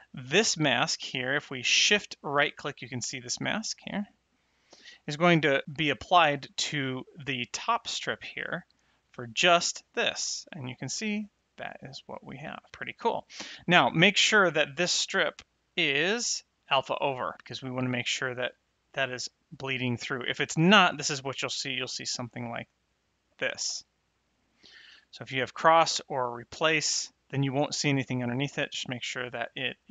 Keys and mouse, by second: 2.1 shift+right click, 8.9 shift+right click, 14.2 click, 15.6 click, 20.7 click, 22.8 click, 25.4 click, 28.6 click.